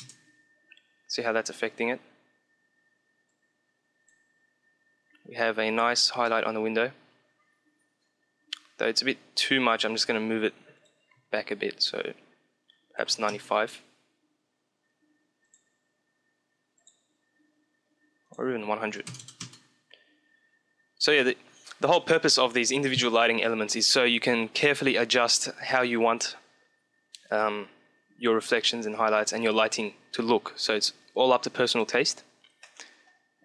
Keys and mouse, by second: 1.2-2.7 middle drag, 3.1 click, 3.6 click, 4.3-6.4 middle drag, 10.7-12.2 drag, 15.2-16.9 drag, 18.2-19.9 drag, 31.1-32.5 drag, 32.2-33.4 middle drag.